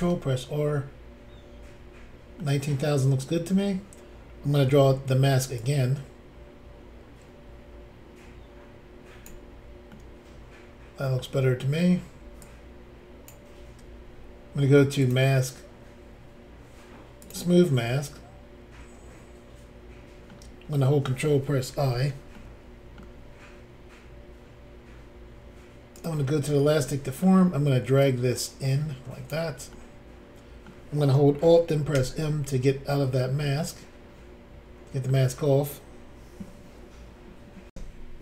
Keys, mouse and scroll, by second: 0.1 click, 2.4 middle click, 9.9 middle click, 12.4 ctrl+click, 15.0 click, 15.0 click, 17.2 click, 17.2 click, 17.8 middle click, 21.7 ctrl+i, 22.3 middle click, 25.9 click, 26.0 click, 26.3 scroll down 2, 26.8 middle click, 28.0 click, 29.7 middle click, 31.9 alt+m, 33.4 middle click, 37.7 Insert.